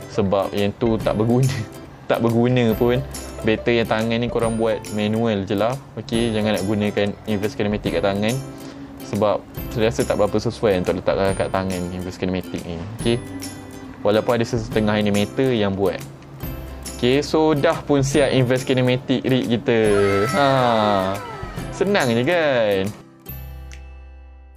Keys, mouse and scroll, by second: 0.0-0.6 middle drag, 1.0 middle click, 1.1 scroll up 2, 1.1 middle click, 1.8-2.6 shift+middle drag, 3.3 click, 7.1 click, 12.0 middle click, 22.3 click.